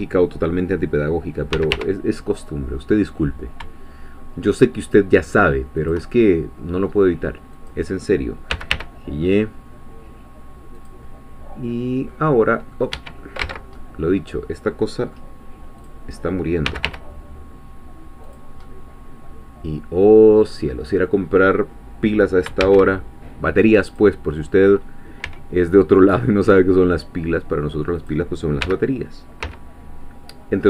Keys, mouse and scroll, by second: 1.5 g, 1.7 y, 5.8 shift+click, 6.2-7.5 shift+middle drag, 7.5 click, 8.5 g, 8.7 y, 11.3-12.1 scroll down 2, 12.1 middle click, 12.9 Escape, 13.4 ctrl+z, 13.8-15.3 ctrl+middle drag, 15.3-15.9 scroll down 2, 15.9 click, 16.7-17.4 scroll down 2, 16.7 g, 16.9 y, 17.4-18.3 scroll down 1, 18.3 click, 18.6-20.7 middle drag, 21.5-22.5 scroll down 2, 22.6 shift+a, 23.9 click, 24.7-25.0 scroll down 2, 25.2 s, 28.0 click, 28.6 g, 29.4 z.